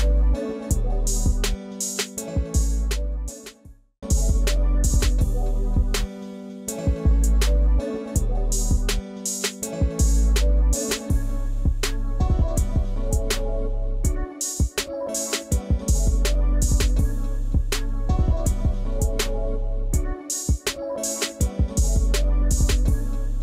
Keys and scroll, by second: 14.0 Delete.